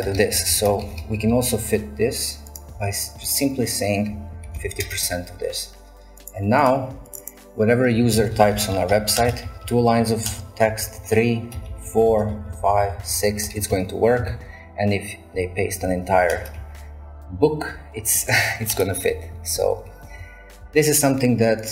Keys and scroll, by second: 0.0-0.9 typing, 4.2-5.1 typing, 7.7-19.9 typing, 11.6 Return, 12.2 shift+Return, 12.8 shift+Return, 13.5 shift+Return, 16.4 Return, 18.7 shift+Return, 21.5 typing.